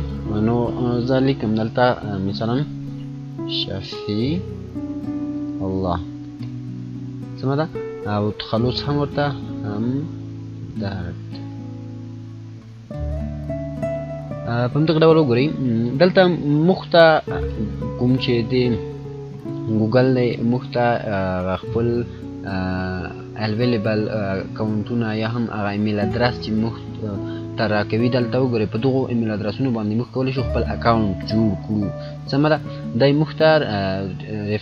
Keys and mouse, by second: 2.7 F9, 2.7-6.8 typing, 7.7 click, 8.9-11.3 typing, 14.3 typing, 15.8 click.